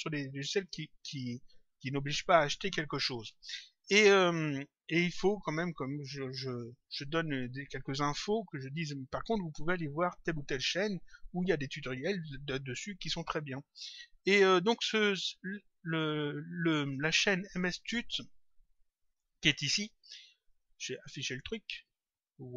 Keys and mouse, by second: 4.1 click, 14.5 click, 19.0 click, 20.4 click.